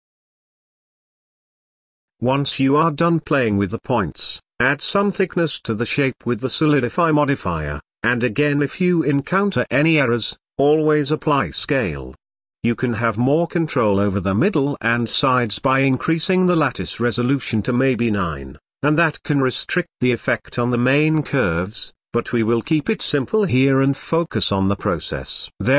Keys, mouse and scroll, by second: 0.9 Tab, 1.2 middle click, 2.0 click, 2.4 drag, 2.7-4.8 middle drag, 5.7-9.1 drag, 9.1 middle click, 9.8-12.3 drag, 12.3-13.2 middle drag, 13.2-13.5 scroll up 3, 13.5-14.9 shift+middle drag, 14.9 ctrl+a, 17.0-19.4 middle drag, 19.4-21.2 drag, 21.2-23.3 middle drag, 23.5-23.8 scroll down 2, 23.8-25.7 shift+middle drag.